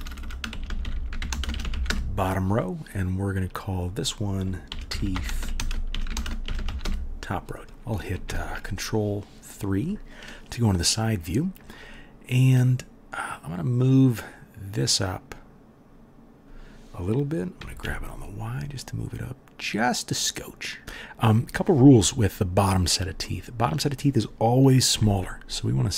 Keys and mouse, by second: 0.0-0.9 typing, 3.6 click, 5.0 e, 7.6-25.9 drag, 8.2 ctrl+KP_3, 13.2 middle click, 13.2 right click, 17.6 g, 24.9 s.